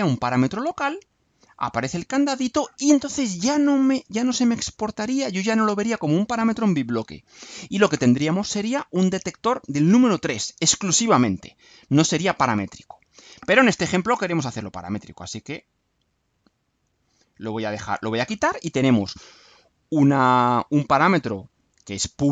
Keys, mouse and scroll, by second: 1.1 click, 13.9 click, 14.1 right click, 15.3 click, 16.3 click, 17.7 click.